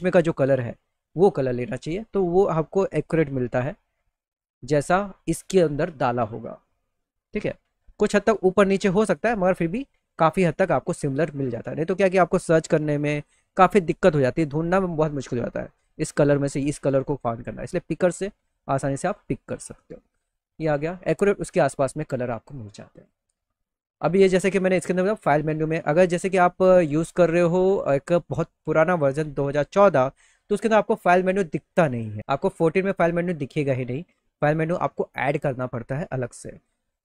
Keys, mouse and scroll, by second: 0.0 click, 2.0 click, 3.0 click, 7.1 click, 11.9 click, 12.6 click, 13.5 click, 14.0 click, 17.5 click, 18.6 click, 20.0 click, 22.5 click, 23.3 click, 24.9 click, 26.6 click, 27.4-28.6 scroll down 1, 34.3 click.